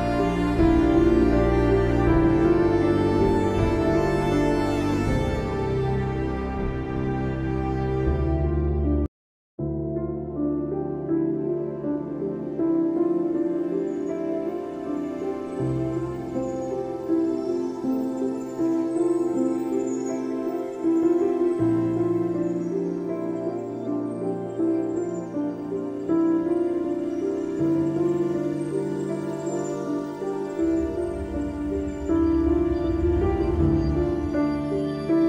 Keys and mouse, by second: 1.1 click, 1.6 space, 2.0 space, 2.1 click, 2.2 space, 3.4 click, 3.7-5.7 typing, 3.9 click, 4.2 click, 5.2 click, 5.6 click, 6.9 click, 8.8-10.2 typing, 12.3 click, 12.6-13.0 typing, 12.7 click, 14.8 alt+shift+click, 16.1-20.2 drag, 20.2 space, 20.4 click, 20.9 click, 22.7 ctrl+=, 23.4 click, 24.5 shift+click, 25.9 click, 27.0 click, 29.1 click.